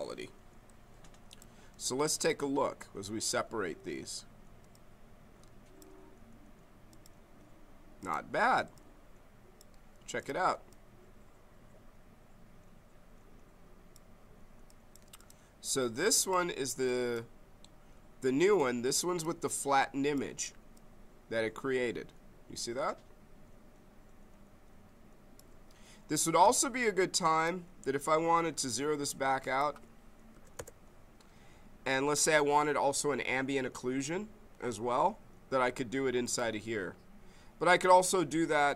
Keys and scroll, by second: 26.4 z, 30.3 0, 30.5 Return.